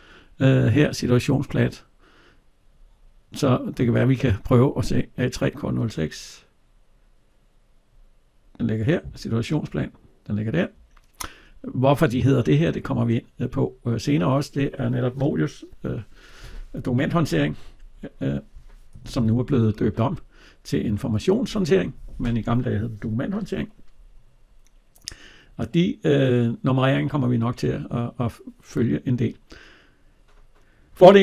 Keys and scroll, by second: 19.1 alt+Tab.